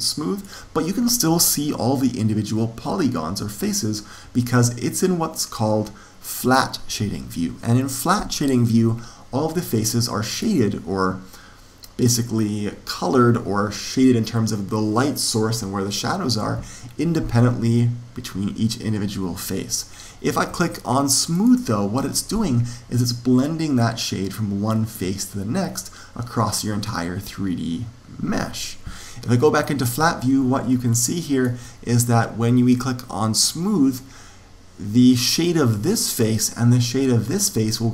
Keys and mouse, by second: 9.5-21.3 middle drag, 21.3 click, 29.7-31.6 drag.